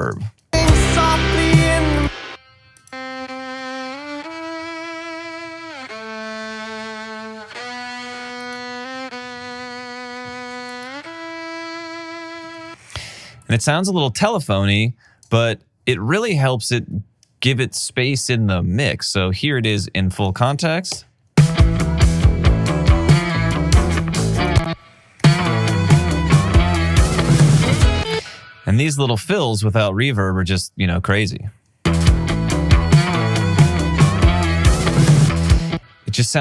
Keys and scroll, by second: 0.3 space, 12.7 space, 13.6 alt+space, 21.2 typing, 24.6 space, 24.8 space, 25.5 r, 27.3-28.3 typing, 31.7 space, 35.7 space.